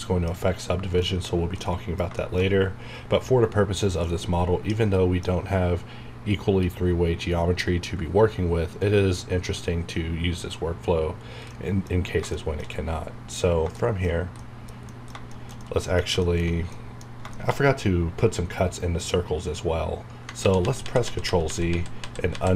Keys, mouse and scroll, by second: 0.0 middle click, 1.2 shift+scroll down 1, 1.6 middle click, 2.5-3.6 scroll up 1, 4.0-11.5 middle drag, 11.5 middle click, 13.3 scroll down 1, 13.8 middle click, 13.9 middle click, 19.8-20.2 scroll down 1, 20.4 z.